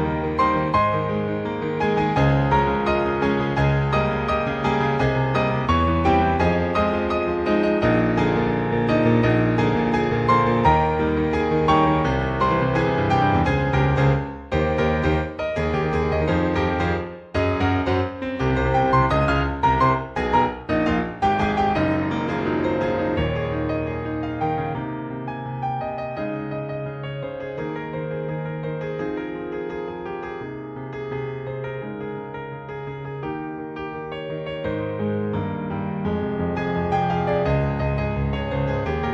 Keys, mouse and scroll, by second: 0.3 scroll down 1, 0.7 click, 1.6-2.0 scroll down 2, 2.0 middle click, 3.5-4.6 scroll down 5, 4.7 shift+middle click, 7.3 click, 7.9 alt+middle click, 8.5 alt+middle click, 8.8 alt+middle click, 9.2-9.6 scroll up 3, 9.8 shift+middle click, 10.2-11.6 scroll up 5, 11.6 scroll up 1, 11.8 shift+middle click, 12.7 scroll down 2, 14.3-15.2 scroll down 1, 15.2 click, 16.2 click, 23.4 ctrl+Tab, 23.9 click, 24.1 click, 25.1 click.